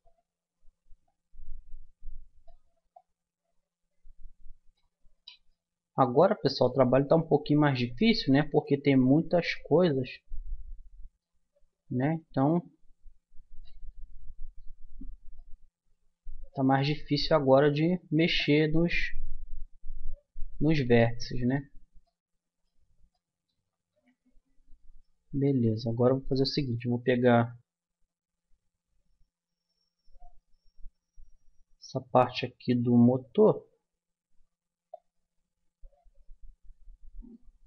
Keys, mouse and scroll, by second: 5.2 click, 5.5-6.9 middle drag, 7.2-8.4 middle drag, 8.8 z, 11.0 middle click, 12.2-13.7 drag, 13.9-16.4 middle drag, 17.2-18.3 middle drag, 18.3-20.1 drag, 21.0-24.9 middle drag, 23.7 Tab, 24.9-26.3 drag, 25.5 Tab, 26.3 middle click, 26.5 click, 26.5 middle click, 30.1 z, 33.4 b.